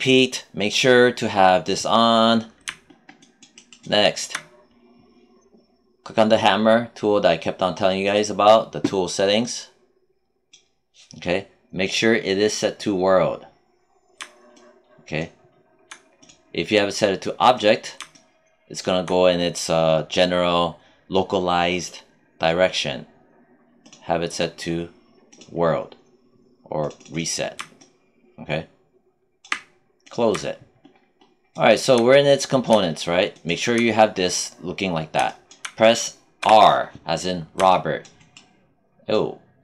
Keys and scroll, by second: 36.3 r.